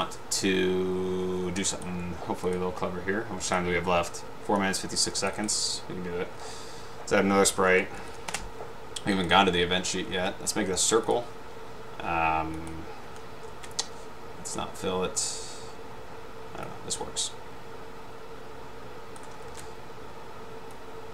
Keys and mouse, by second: 1.8 click, 3.6 click, 5.5 click, 7.5-8.7 typing, 9.2-9.6 drag, 12.7-13.1 drag, 13.6 ctrl+z, 17.3-19.5 drag, 19.6 ctrl+z, 20.9 click.